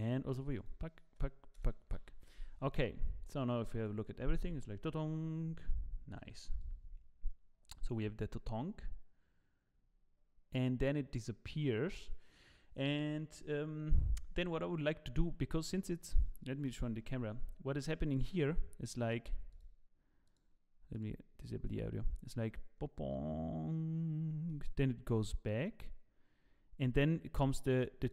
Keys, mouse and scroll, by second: 0.6 click, 3.2 click, 3.7 click, 6.8 click, 16.7 KP_0.